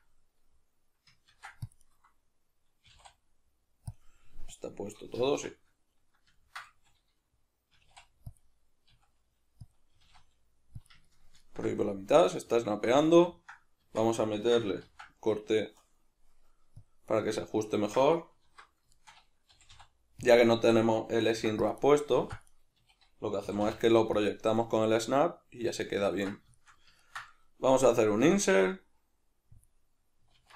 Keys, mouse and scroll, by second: 1.3 ctrl+r, 2.0 right click, 2.8 s, 4.0 click, 4.6-6.4 drag, 5.2 Escape, 6.4-8.4 ctrl+middle drag, 6.8 a, 7.8 s, 8.4 click, 8.9 s, 9.8 click, 10.0 g, 10.9 click, 11.1-20.3 ctrl+middle drag, 13.8 Tab, 14.8 ctrl+r, 17.2 right click, 18.5 alt+q, 19.5 g, 20.3 click, 21.3 ctrl+r, 21.9 right click, 22.1 ctrl+r, 22.6 right click, 22.7 a, 23.4 g, 24.3 click, 24.5-29.7 middle drag, 29.7 click, 30.4 alt+q.